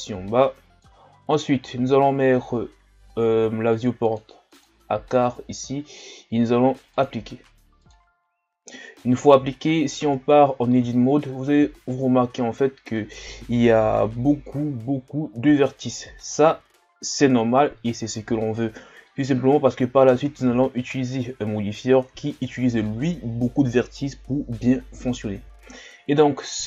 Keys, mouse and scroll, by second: 9.1-9.6 shift+scroll up 2, 10.5 Tab, 11.0-11.6 shift+scroll up 4, 20.7 scroll down 2.